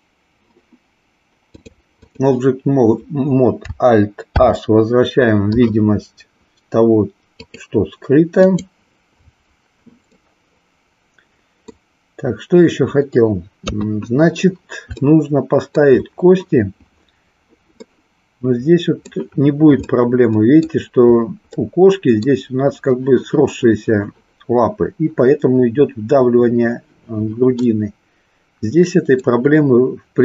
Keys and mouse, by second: 1.5 click, 4.3 alt+h, 7.4 click, 8.5 click, 10.1-11.8 middle drag, 13.5 KP_3, 15.1-15.9 shift+middle drag, 17.9-19.1 middle drag, 19.8-20.8 middle drag, 21.7 middle click, 27.7-29.3 middle drag.